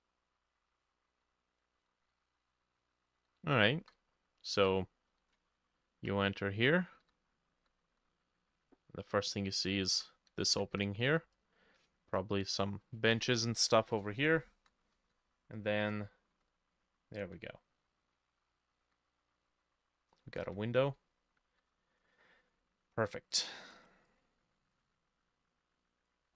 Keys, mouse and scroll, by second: 0.0-3.7 typing, 4.9-5.2 scroll down 2, 5.2-7.6 typing, 10.0 w, 10.4 s, 10.6 d, 10.8 a, 14.6-17.1 typing, 18.2-21.7 typing, 23.8 right click.